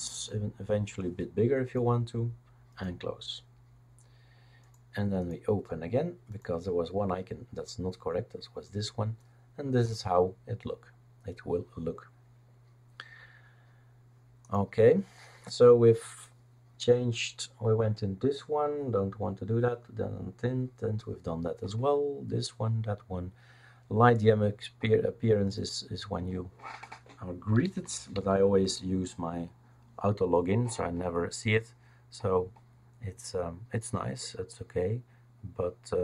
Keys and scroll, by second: 27.3-28.7 typing.